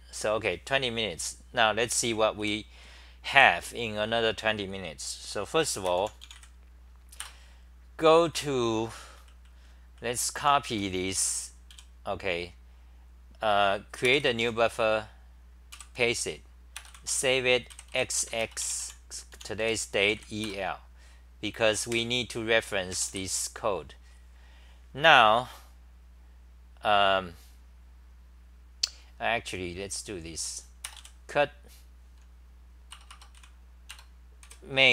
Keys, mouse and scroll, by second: 2.4 w, 7.2 Return, 8.3-11.7 typing, 15.7 k, 18.2 Home, 19.3 u, 20.5 Return, 21.9 super+=, 29.0 typing, 32.9 Return, 33.3 c.